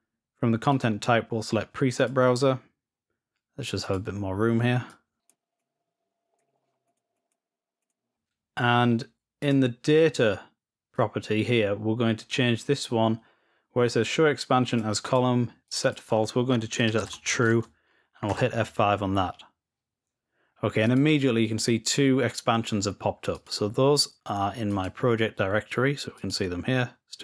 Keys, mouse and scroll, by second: 0.5 click, 1.9 click, 3.8 click, 5.2 click, 5.5-6.5 drag, 6.8 click, 7.7 click, 9.2-10.0 drag, 10.7-16.0 drag, 20.6 click, 23.1 click, 24.4 click, 25.9 click, 26.1-26.7 drag.